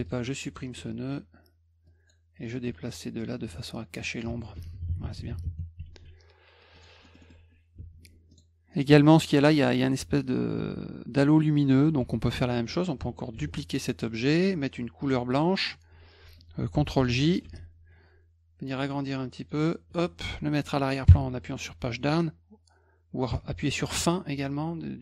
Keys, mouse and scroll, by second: 0.0 ctrl+alt+click, 1.9 click, 2.9-4.2 drag, 5.9 ctrl+s, 6.7 click, 7.0 middle click, 7.0 scroll up 4, 7.2 middle click, 7.8 F2, 8.3 click, 8.7 click, 12.0 F1, 13.3 ctrl+d, 15.0 click, 17.0 ctrl+j, 17.4 F2, 18.7 click.